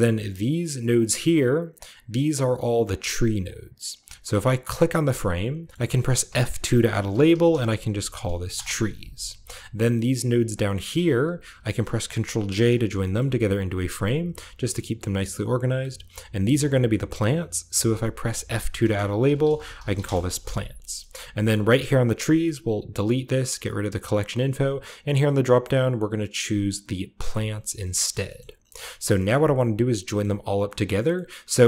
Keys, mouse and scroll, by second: 0.8-1.4 drag, 1.0-2.8 scroll up 1, 1.1-1.7 typing, 1.7 click, 2.0 middle click, 2.4-2.8 drag, 2.8 middle drag, 3.0-3.3 drag, 3.3 middle click, 3.5-3.8 drag, 3.8 middle click, 4.0 click, 4.6 middle click, 4.7-5.5 drag, 5.7 click, 5.9-9.4 typing, 8.4 Return, 9.1 scroll down 2, 9.7-10.5 middle drag, 10.5-12.9 drag, 10.8-11.6 typing, 12.3 ctrl+j, 12.9 middle click, 13.1-14.1 scroll up 2, 13.1-14.2 typing, 13.7 ctrl+middle click, 13.8 click, 13.9 middle click, 14.1 click, 14.8 click, 16.2 click, 16.8-18.3 middle drag, 16.8-18.3 scroll up 1, 18.3 F2, 19.1-20.4 typing, 20.6 middle click, 20.9 middle click, 21.0-23.3 scroll up 1, 21.4-23.3 middle drag, 23.3 click, 24.6 click, 27.1 click, 27.7-29.9 scroll down 1, 27.8-29.9 middle drag, 30.1 middle click, 30.7 middle click, 30.9-31.6 scroll up 1, 31.4-31.6 middle drag.